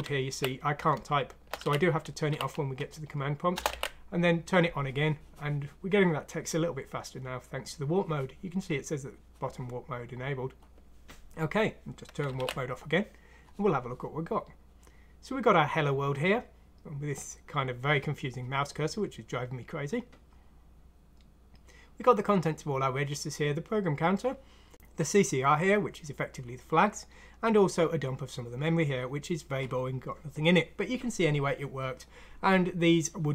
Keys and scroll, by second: 0.0-2.3 typing, 3.5-4.5 typing, 3.9 alt+w, 12.3 alt+w.